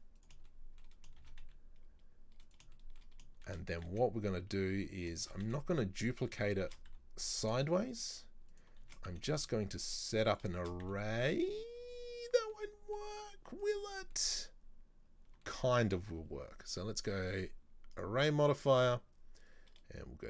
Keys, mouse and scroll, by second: 0.5 shift+middle click, 1.2 shift+d, 2.8 shift+middle click, 3.5 shift+d, 5.3 shift+d, 8.9 shift+d, 10.7 shift+d, 12.6 middle click, 13.0 scroll down 1, 13.2 z, 14.0 scroll down 1, 14.2-17.1 middle drag, 17.1-20.2 drag.